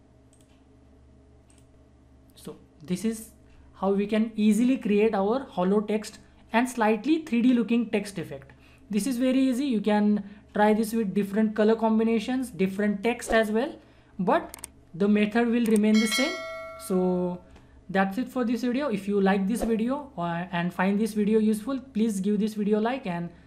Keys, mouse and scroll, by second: 13.3 click, 17.8-19.7 drag.